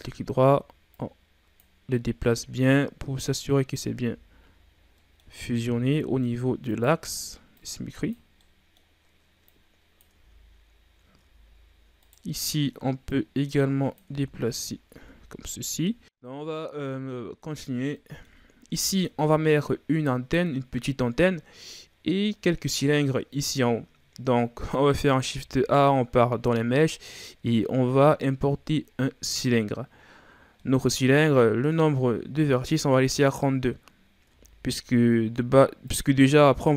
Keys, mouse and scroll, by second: 0.9-2.6 drag, 2.6-3.0 scroll up 2, 3.2 right click, 4.0 Tab, 4.3-4.9 scroll down 4, 4.9 middle click, 5.2-5.6 scroll up 5, 5.6 Tab, 5.9 middle click, 6.6 right click, 7.5 click, 8.3-9.5 middle drag, 9.5 click, 10.1 Tab, 10.4-10.9 scroll down 3, 10.9-11.2 scroll up 2, 11.2 Tab, 12.0 right click, 13.0-14.0 drag, 14.0 Tab, 14.9 Tab, 16.3-18.5 middle drag, 18.5-18.8 ctrl+scroll down 2, 18.8-19.4 scroll up 2, 19.4-22.5 middle drag, 22.6-23.8 middle drag, 23.8-24.3 scroll down 2, 24.3-25.1 middle drag, 25.1 shift+a, 29.9-30.5 scroll down 3, 30.5-33.5 middle drag, 34.2 Tab, 35.8-36.7 drag.